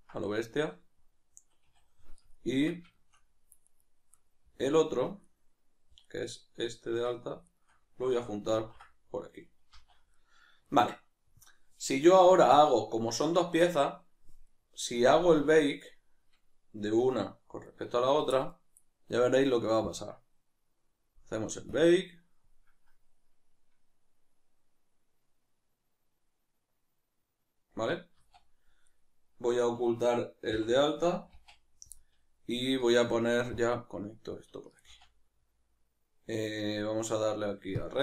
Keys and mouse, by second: 1.7 a, 3.7 right click, 5.3 right click, 6.1 right click, 7.5 shift+right click, 9.1 ctrl+j, 10.1-12.1 middle drag, 12.1 right click, 17.0 right click, 17.6-19.8 shift+right drag, 19.8-28.9 drag, 28.9 right click, 32.0-32.6 middle drag, 32.6 right click, 33.5-38.0 drag.